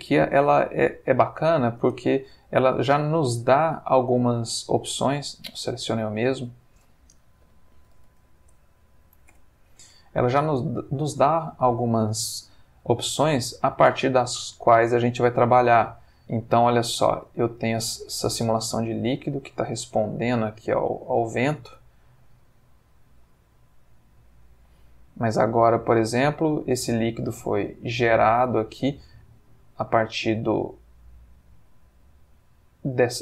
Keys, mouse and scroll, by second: 0.2-1.3 middle drag, 1.8 space, 4.7 Escape, 5.3 x, 5.7 click, 6.3 click, 7.4 F3, 7.8 q, 7.9 u, 8.1 c, 8.2 k, 9.3 Down, 9.8 Return, 10.6-11.9 middle drag, 12.0 shift+space, 14.6-15.5 middle drag, 15.8-17.1 middle drag, 19.3 click, 20.0 x, 20.7 click, 26.5-27.6 middle drag, 28.2-29.1 middle drag.